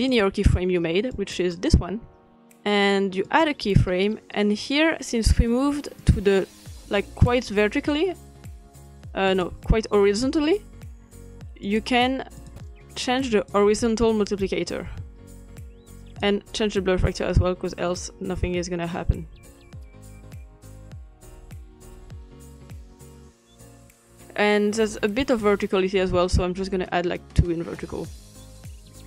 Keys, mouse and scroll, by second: 1.1 click, 3.2 click, 6.0 click, 9.3 click, 11.7 click, 12.4 click, 13.3 click, 16.2 click, 17.3-18.8 scroll down 2, 20.5-21.0 scroll up 2, 21.0-21.6 scroll up 1, 21.6-22.1 drag, 22.2-23.0 drag, 23.3-25.1 drag, 25.2 click, 26.0 middle click, 26.0-26.6 scroll up 2, 26.1 click, 26.6-28.1 scroll down 3, 28.9-29.0 drag.